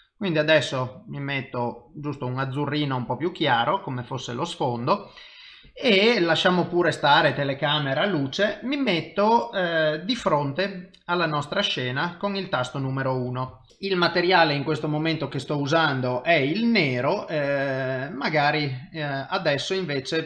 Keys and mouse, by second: 2.7 middle click, 4.0 middle click, 10.2 KP_1, 13.6 shift+middle click, 13.9 click.